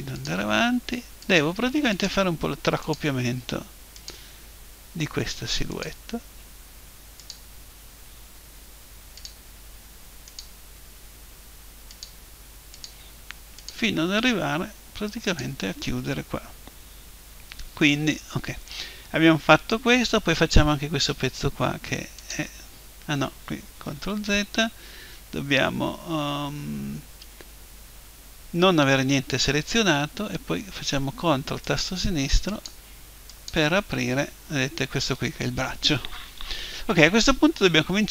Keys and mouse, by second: 9.2-16.9 drag, 22.2 click, 24.1 ctrl+z, 29.0 a, 31.7-34.9 drag.